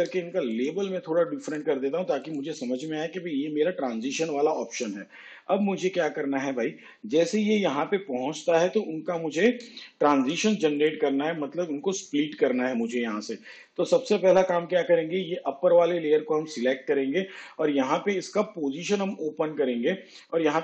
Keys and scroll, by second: 19.9 p.